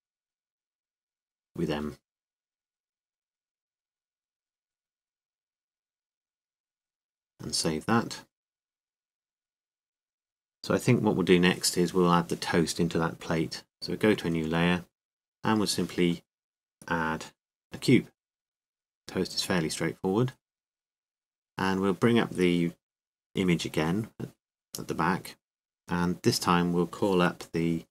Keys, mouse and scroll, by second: 0.4-2.2 right drag, 2.2 m, 4.6-5.9 drag, 5.1-7.6 middle drag, 9.0-10.3 drag, 10.3-13.4 middle drag, 15.1 click, 16.0-19.2 middle drag, 16.6 KP_7, 19.2 click, 22.0 KP_5, 24.4 n.